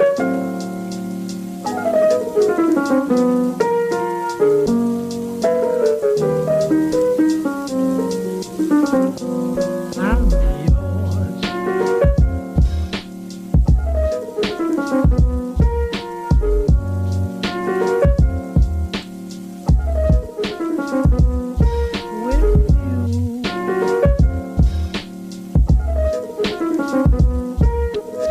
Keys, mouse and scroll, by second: 0.1 g, 1.3 click, 2.0 g, 2.9 s, 4.3 click, 4.8 g, 5.5 s, 7.3 click, 7.6 g, 8.3-9.0 scroll down 7, 9.0 middle click, 9.4 scroll up 5, 11.9-13.3 drag, 13.3 Tab, 13.7-15.9 middle drag, 15.9 click, 16.9-19.9 drag, 20.7-21.7 drag, 21.7 right click, 22.6-23.7 middle drag, 23.7 Tab, 24.2-25.5 middle drag, 25.5 s, 27.7 middle click.